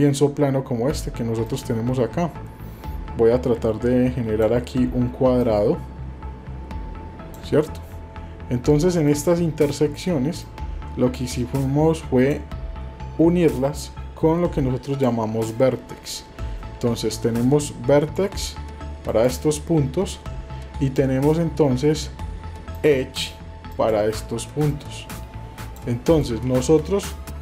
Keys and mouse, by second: 1.6-4.4 drag, 5.4-27.4 drag.